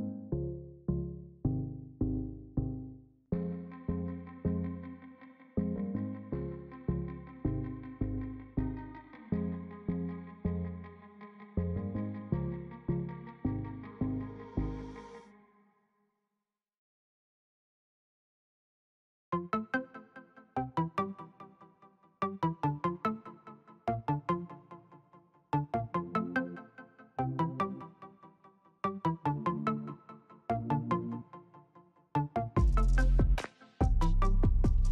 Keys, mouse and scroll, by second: 0.4 Up, 0.9-1.9 typing, 9.6-24.0 drag, 27.0-34.9 drag.